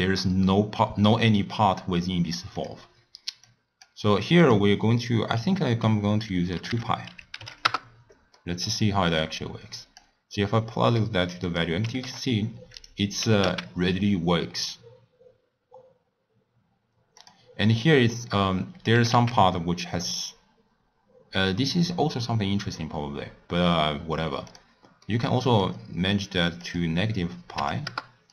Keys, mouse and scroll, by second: 2.6 click, 3.5 click, 4.5-7.5 drag, 8.4-9.3 middle drag, 9.3-11.6 drag, 11.9 g, 13.2 g, 17.9 middle click, 18.3 scroll down 1, 18.4-18.9 scroll up 1, 18.9 g, 25.1 middle click, 25.7-28.3 drag.